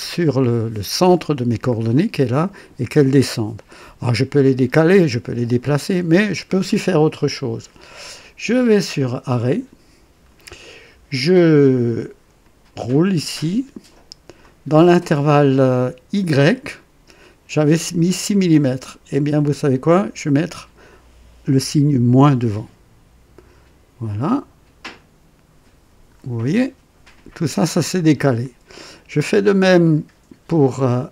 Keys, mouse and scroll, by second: 0.1-1.6 drag, 1.1 right click, 1.1 middle click, 3.6-4.4 drag, 4.8 click, 5.8 right click, 9.4 click, 12.4-14.6 drag, 16.2 click, 18.3 click, 19.9 click, 22.1 KP_Subtract, 24.8-26.3 drag, 26.5-28.9 drag.